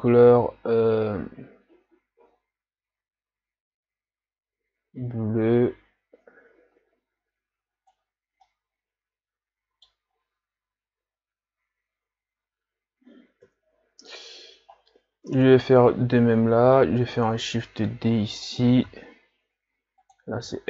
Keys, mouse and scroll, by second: 8.6-10.0 middle drag, 10.0 scroll up 3, 13.5 KP_3, 15.0 scroll down 2, 17.0 shift+d, 18.8 r, 20.5 g.